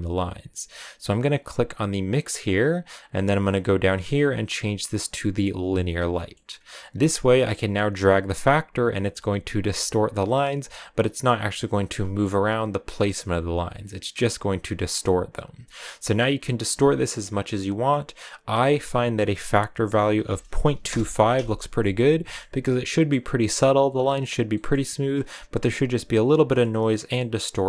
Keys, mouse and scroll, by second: 1.9-5.5 drag, 6.1 middle click, 6.4-7.3 scroll up 1, 7.3-10.3 drag, 11.1-12.3 middle drag, 12.3-15.3 drag, 20.7 click, 21.6-23.2 middle drag, 23.2-23.6 scroll up 2, 24.3 middle click, 24.6-25.0 scroll up 2, 26.1 scroll down 2, 26.3 middle click, 26.8 scroll down 1, 27.0-27.6 middle drag.